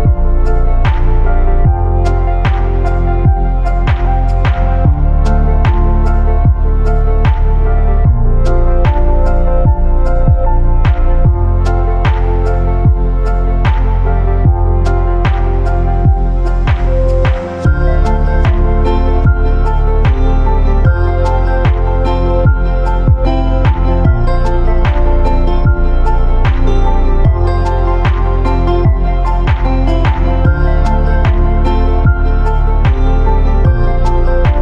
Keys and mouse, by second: 0.6-1.0 shift+drag, 3.3-4.6 shift+drag, 4.8 z, 5.1-6.3 drag, 6.5-8.3 shift+drag, 8.7 Tab, 10.7 3, 12.5 KP_3, 14.1 z, 15.1 shift+click, 16.4 e, 17.8 g, 20.4 shift+click, 21.5 shift+click, 21.8 r, 22.7 g, 25.9 shift+click, 26.2 e, 27.0 g, 27.9 r, 28.7 g, 29.7 shift+middle click, 30.8 e, 31.9 g, 32.9 r, 33.9 g.